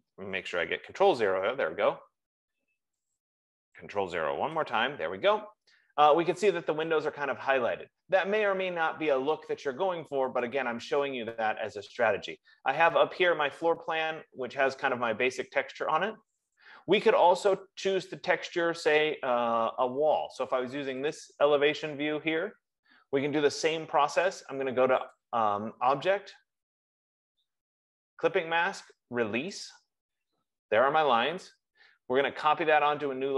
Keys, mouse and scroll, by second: 0.0 click, 1.0 ctrl+0, 3.3 click, 4.8 ctrl+0, 7.7 F15, 11.2-15.8 drag, 21.6-25.5 drag, 30.1 click.